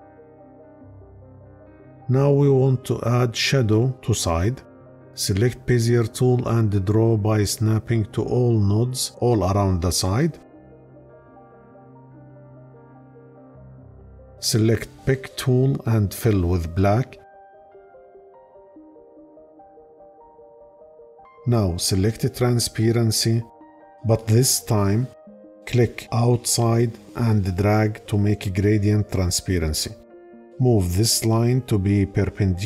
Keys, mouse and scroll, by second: 16.6 click.